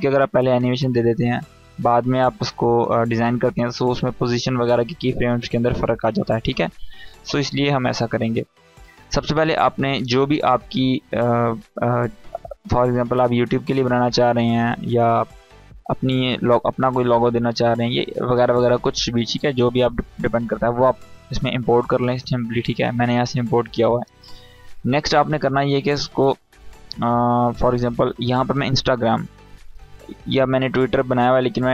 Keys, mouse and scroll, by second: 8.3 click, 19.7 click, 25.1 click, 28.1-29.7 drag.